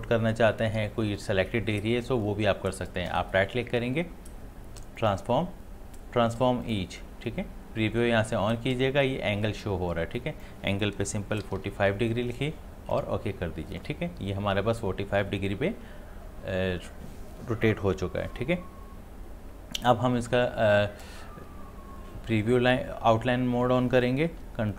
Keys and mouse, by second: 3.1 right click, 5.0 click, 10.2 click, 12.9 click.